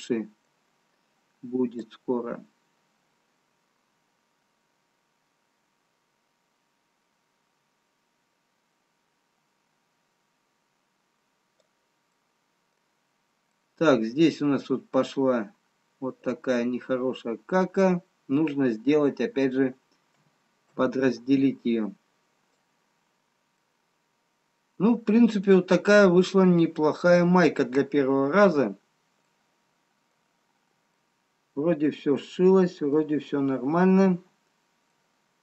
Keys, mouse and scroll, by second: 3.3 click, 12.2 middle click, 13.1-13.5 scroll up 4, 14.7 middle click, 18.1 scroll down 1, 23.1 middle click, 23.6 middle click, 25.7-26.2 scroll down 1, 26.7 middle click, 26.7 scroll up 1, 30.1 scroll down 1, 31.1 middle click.